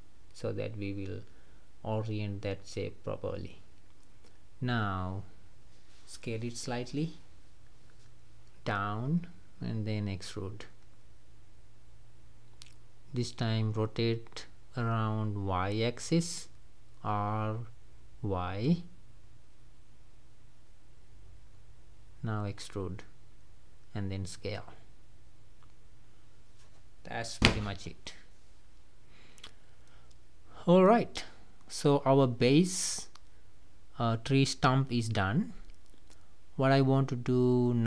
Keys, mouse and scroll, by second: 3.8 s, 6.7-7.4 scroll up 2, 7.6-8.7 shift+middle drag, 8.7-9.0 scroll up 1, 9.3-11.1 middle drag, 11.1 e, 13.8 s, 15.6-16.7 middle drag, 16.7-18.0 scroll down 1, 18.0 r, 23.1 e, 24.7 s, 26.3 click, 26.6 scroll down 3, 26.9-28.4 middle drag, 28.4-29.3 scroll up 1, 29.3 click, 29.7 scroll down 2, 30.2 middle click, 30.8-31.1 scroll down 2, 31.3 click, 32.1 Tab, 32.4-32.8 middle drag, 32.8-33.2 scroll up 3, 33.3 click, 33.7-34.3 middle drag, 34.3 scroll down 3, 34.5-36.7 middle drag, 36.7 ctrl+s, 37.0-37.7 scroll down 2, 37.7-37.8 middle drag.